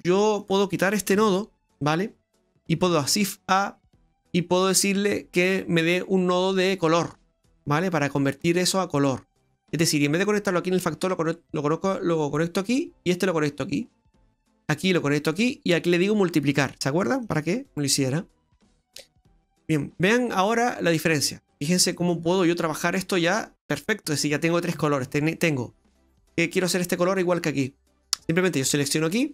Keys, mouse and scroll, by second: 0.4 click, 1.3 Delete, 3.0 shift+a, 9.7 click, 12.7 click, 14.6 click, 15.8 click, 18.6 middle click, 19.6 middle click, 19.6-19.9 scroll up 2, 20.0 middle click, 20.9 middle click, 21.6-21.9 scroll down 2, 21.9 middle click, 24.8 middle click, 25.2-26.1 scroll up 3, 28.6 click.